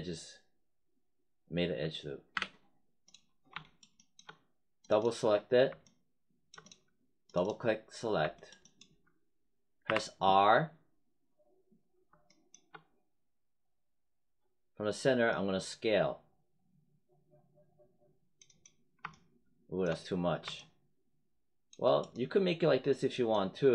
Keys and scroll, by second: 2.3 w, 9.8 r.